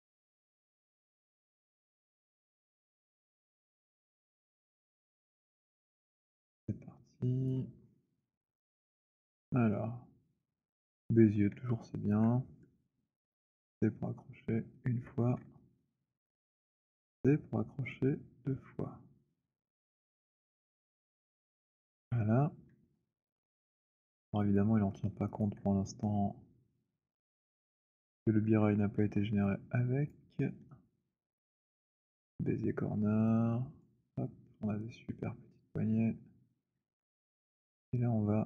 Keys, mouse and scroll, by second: 0.8 click, 0.9 z, 3.8 alt+click, 7.5 right click, 8.1 click, 9.3 alt+middle click, 10.4 click, 12.0 alt+click, 13.9-14.7 c, 14.9 click, 14.9 c, 16.3 click, 16.3 alt+middle click, 20.1-21.8 typing, 20.5 click, 24.1 alt+click, 24.5 alt+click, 25.0 alt+middle click, 25.0 alt+right click, 27.0 right click, 30.1 click, 32.1 shift+right click, 33.6 click, 36.6 click.